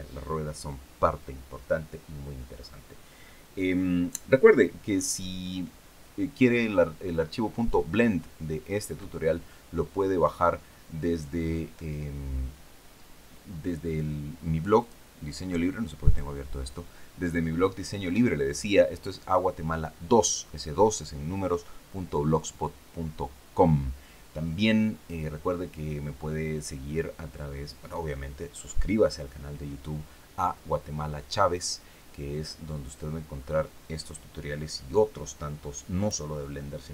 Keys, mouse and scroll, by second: 14.5 click, 15.7 click.